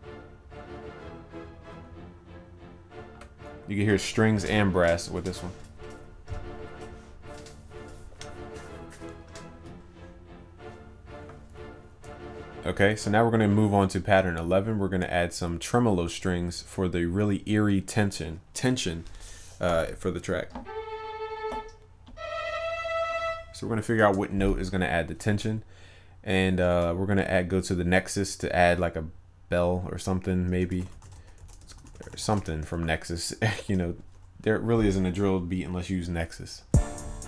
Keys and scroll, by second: 26.8 ctrl+s, 33.6 ctrl+s.